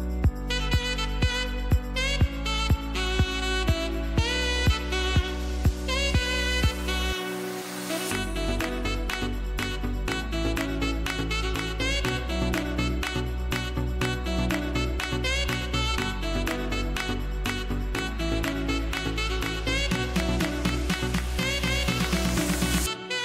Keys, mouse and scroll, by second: 7.7 ctrl+Num_Lock, 8.0 ctrl+j, 9.3 click, 12.0-16.1 drag, 17.7-18.3 scroll down 1, 19.1 e, 19.5-20.0 scroll up 1, 20.0-23.2 drag.